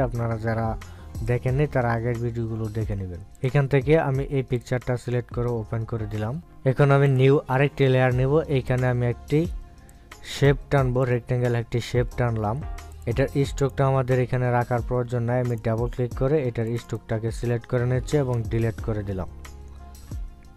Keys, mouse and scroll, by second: 2.8-4.9 drag, 8.8 click.